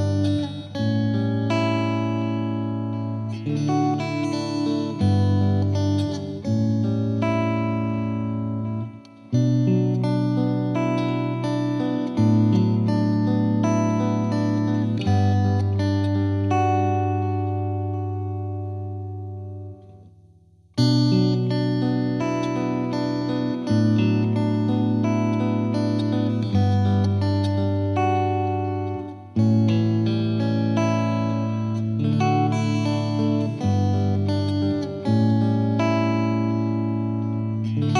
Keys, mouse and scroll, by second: 0.8 scroll up 3, 1.0 shift+middle click, 1.2 z, 6.0 middle click, 6.2 z, 6.5-7.3 scroll down 3, 7.3-8.4 scroll down 1, 8.4-14.3 drag, 14.3 space, 21.8 t, 35.0 space, 35.9-37.9 drag.